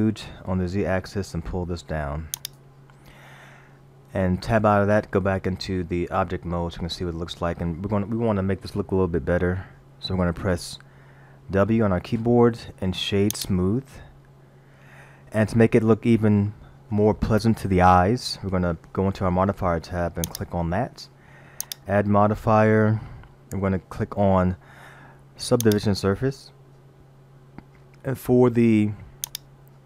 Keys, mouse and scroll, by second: 4.6 Tab, 11.6 w, 14.0-14.6 scroll up 2, 20.3 click, 21.6 click, 29.3 click.